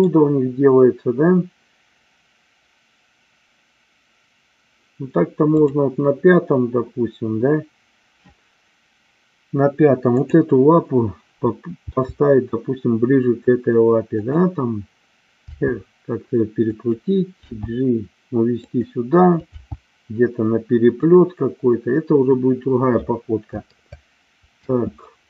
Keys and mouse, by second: 5.6 click, 11.8 g, 14.1 click, 15.5 r, 16.8 click, 17.4 g, 18.6 click, 19.4 g, 24.5 space.